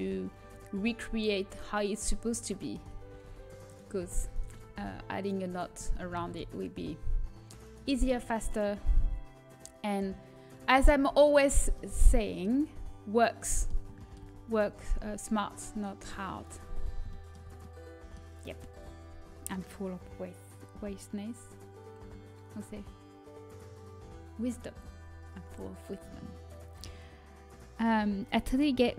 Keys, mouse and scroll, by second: 1.1 middle click, 2.4 middle click, 3.0 g, 6.2 z, 7.5-10.7 right drag, 9.0 g, 10.9 z, 12.6 middle click, 13.5-14.7 middle drag, 14.7 g, 16.5 middle click, 17.8 middle click.